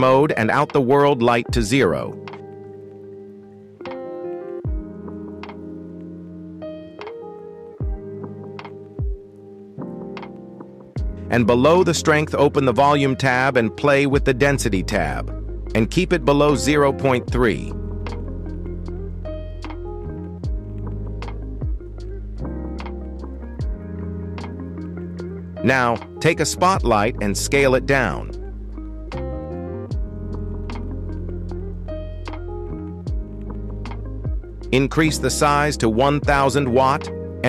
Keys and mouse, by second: 0.3 click, 0.6-0.9 middle drag, 1.7 shift+middle drag, 2.3-2.6 middle drag, 2.9 middle drag, 3.5 shift+a, 5.7 KP_0, 7.3 z, 8.2 click, 10.5 click, 11.3 click, 13.1-15.8 drag, 17.7-19.6 shift+drag, 21.6 KP_1, 22.5 shift+a, 27.6 g, 28.6 z, 28.7 z, 28.9 s, 30.3-31.7 typing, 33.3-34.8 drag, 34.4 KP_0.